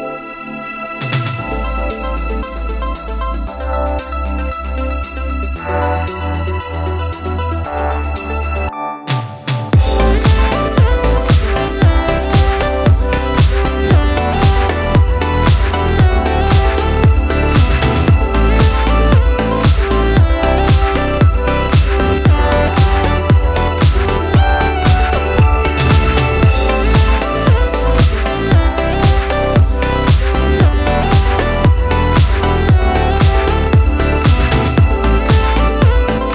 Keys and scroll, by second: 7.6 ctrl+t, 11.6 ctrl+t, 16.2 Return, 17.6 ctrl+t, 18.7 ctrl+t, 21.9 Escape, 23.4 ctrl+t.